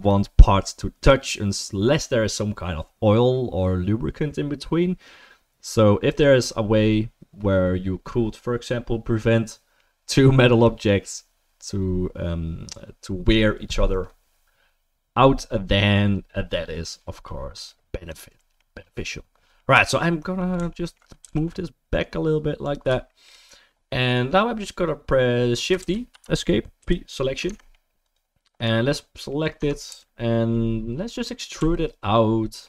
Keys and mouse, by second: 18.1 click, 18.2-20.9 middle drag, 21.2 g, 23.1-32.6 shift+middle drag, 25.8 shift+d, 26.8 p, 27.4 Tab, 29.6 Tab, 30.0 a, 31.6 e.